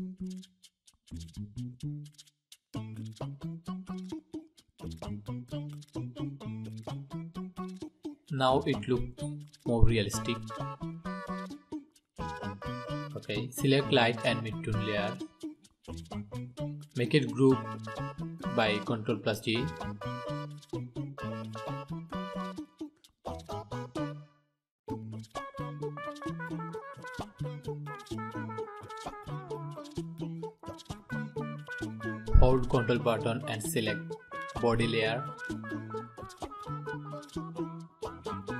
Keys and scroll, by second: 17.8 ctrl+g.